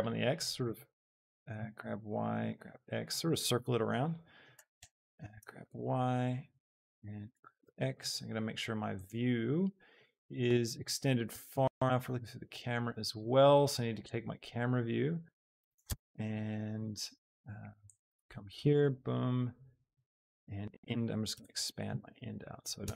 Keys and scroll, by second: 0.7 e, 1.1 Escape, 1.5 g, 1.8 y, 2.6 x, 4.8 Escape, 5.5 y, 7.3 g, 7.7 x, 11.4 Return, 15.8 Tab, 21.3 KP_0, 21.7 Return, 22.8 Tab.